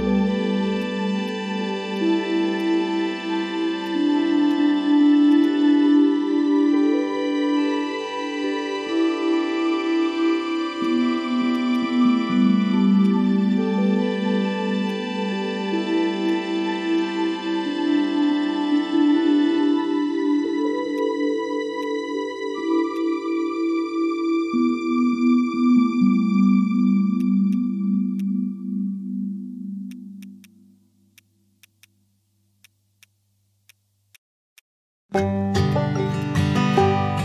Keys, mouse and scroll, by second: 5.3 shift+click, 11.5 right click, 13.7 ctrl+z, 14.3 ctrl+z, 19.9 right click, 20.4 ctrl+z, 27.2 shift+click.